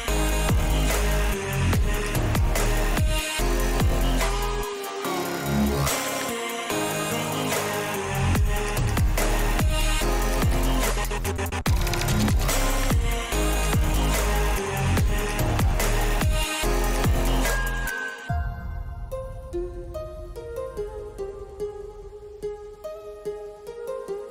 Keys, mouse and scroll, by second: 2.0 alt+a, 3.3 click, 4.1 alt+a, 6.1 click, 6.8 l, 7.8 l, 10.8-12.3 drag, 13.0 click, 14.5 Tab, 16.5 click, 17.1-23.4 drag.